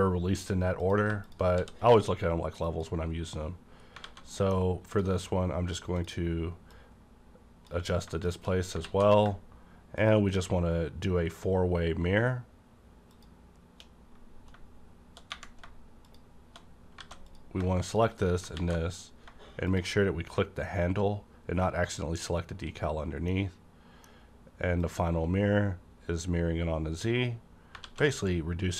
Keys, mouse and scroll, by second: 0.8 ctrl+click, 1.5 d, 2.6 click, 4.0 a, 4.3 middle click, 4.9 click, 6.0-8.3 drag, 8.3 shift+click, 8.6 scroll down 1, 8.8 alt+x, 10.0 shift+click, 13.1 shift+click, 16.1 shift+click, 17.0 alt+a, 17.3 click, 17.9 click, 18.5 alt+x, 19.7 click, 23.3-27.7 middle drag, 24.8 click, 27.7 click, 27.7 middle click, 27.8 a, 28.1-28.7 middle drag.